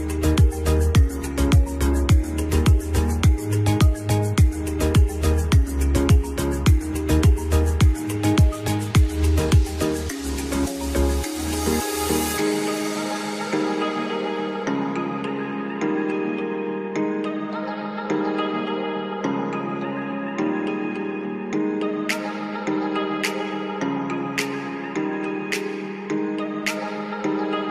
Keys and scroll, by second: 8.5 ctrl+z.